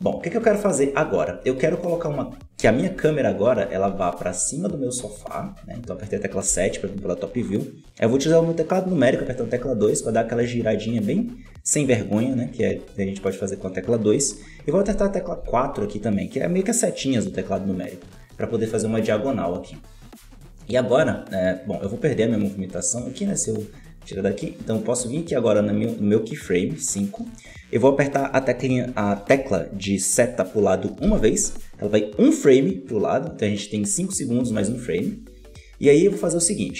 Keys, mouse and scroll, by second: 1.0-2.8 middle drag, 2.8 KP_7, 4.0 shift+middle click, 4.6 scroll up 1, 5.1-6.3 shift+middle drag, 6.3 KP_7, 9.0 KP_2, 10.4 KP_2, 12.7-14.8 shift+middle drag, 14.8 KP_4, 15.3 KP_4, 22.4-25.5 drag, 31.0 Right.